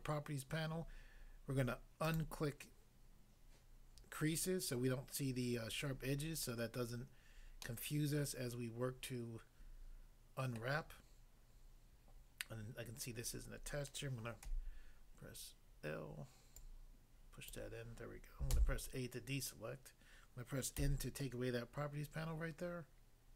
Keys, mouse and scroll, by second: 2.1 click, 7.6 middle click, 10.6 middle click, 14.5 l, 16.6 click, 17.5 click, 18.6 a, 20.8 n.